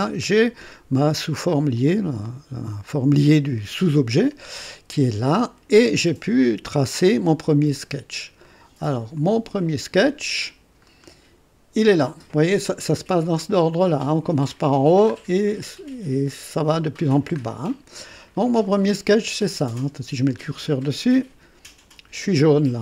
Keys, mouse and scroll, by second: 1.7-3.6 drag, 4.2-5.8 drag, 5.9-8.2 drag, 8.4 right click, 9.1 click, 10.8 scroll down 2, 15.1-15.5 scroll down 2, 17.3-17.7 scroll up 2, 18.8 click.